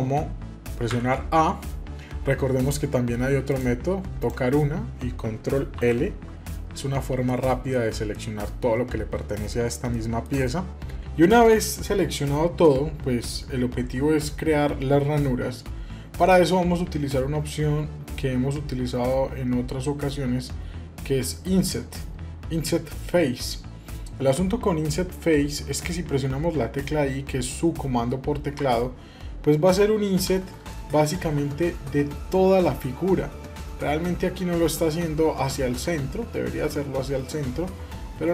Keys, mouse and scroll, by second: 0.9 a, 3.5 click, 4.2 click, 5.7 ctrl+l, 7.3 shift+middle click, 8.1-9.5 middle drag, 9.9 shift+middle click, 10.5 middle click, 30.5 middle click, 31.1 i.